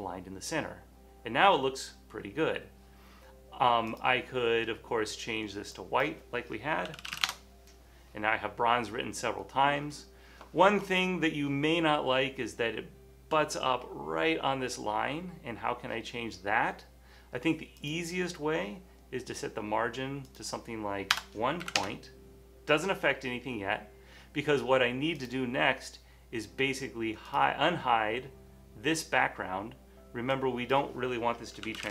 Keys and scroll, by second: 6.8-7.7 typing, 8.8 typing, 10.4 typing, 21.3 BackSpace, 21.7 1, 21.9 Return, 31.5-31.9 typing.